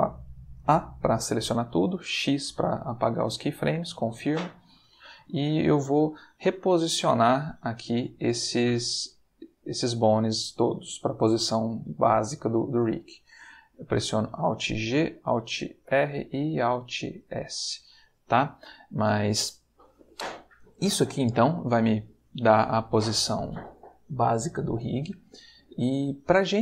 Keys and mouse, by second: 1.7 x, 2.3 click, 6.9 a, 14.7 alt+g, 15.8 alt+r, 17.1 alt+s.